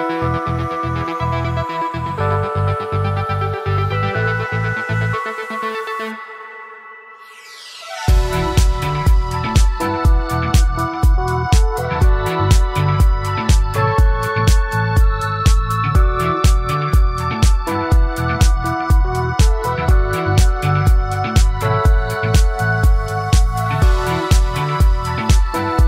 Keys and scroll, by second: 10.0 ctrl+a, 12.0 ctrl+d, 17.8 ctrl+space.